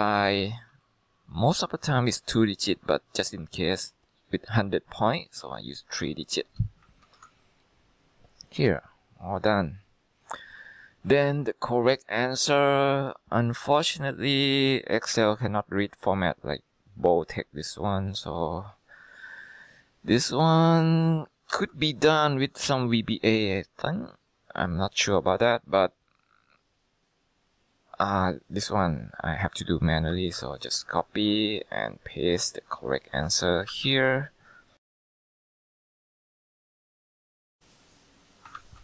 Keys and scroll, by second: 0.8 ,, 5.6-6.9 typing, 7.1 ctrl+Return, 21.6 ctrl+c, 30.2 ctrl+c, 33.8 ctrl+v, 35.3 ctrl+c, 35.4 ctrl+v, 35.7 ctrl+c, 35.9 ctrl+v, 36.2 ctrl+c, 36.3 ctrl+v, 36.7 ctrl+c, 36.9 ctrl+v, 37.2 ctrl+c, 37.4 ctrl+v, 38.7 ctrl+c.